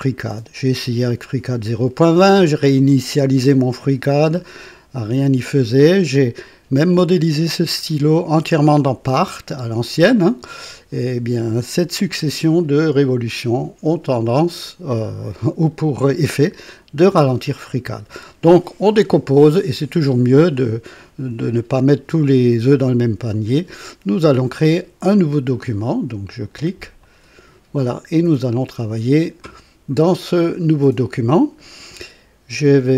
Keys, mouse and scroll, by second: 26.9 click.